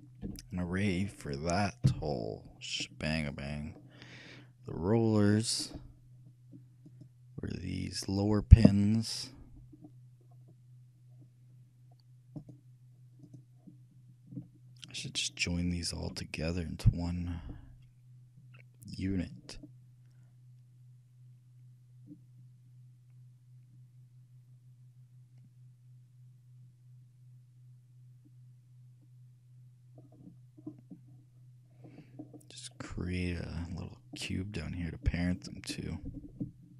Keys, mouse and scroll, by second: 0.5 m, 2.1 n, 3.0-5.1 middle drag, 5.5-7.0 scroll up 1, 7.0-8.7 right drag, 9.9-11.3 middle drag, 11.3-12.4 scroll down 1, 12.4 scroll up 1, 12.6-17.4 right drag, 30.2 middle click, 32.4-33.2 scroll up 1, 33.2 scroll up 1, 33.4 middle click, 34.3-36.0 drag, 36.6-36.7 shift+middle drag.